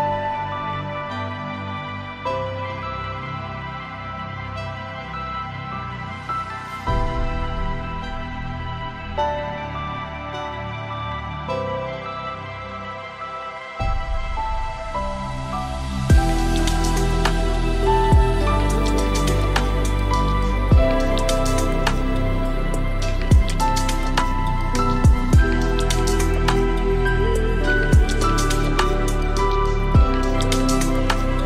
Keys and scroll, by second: 15.7 ctrl+a, 22.4 ctrl+d.